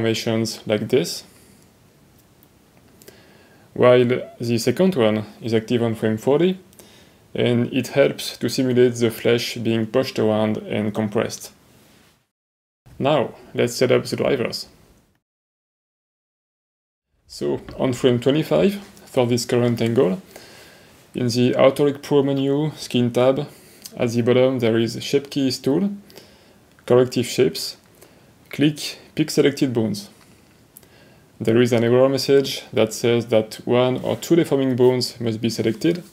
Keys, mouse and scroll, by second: 1.7 click, 2.2 click, 2.7 middle click, 2.9 middle click, 6.9 click, 7.7 click, 14.5 click, 18.4 middle click, 19.8 middle click, 24.1 middle click, 29.4-36.1 drag.